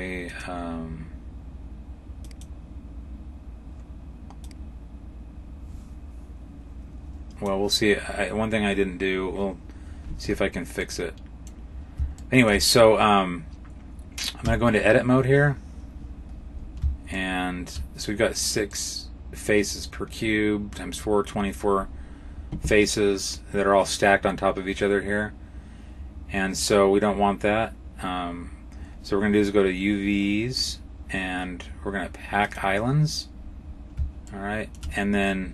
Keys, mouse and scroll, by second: 0.2 click, 2.1 click, 4.3 click, 10.7 middle click, 12.1 shift+middle click, 14.3 Tab, 15.8-17.0 scroll down 9, 17.0 shift+middle click, 17.0-17.6 scroll down 2, 18.5 scroll down 1, 18.6 middle click, 30.4 click, 33.2-33.8 scroll up 5, 34.2 shift+middle click.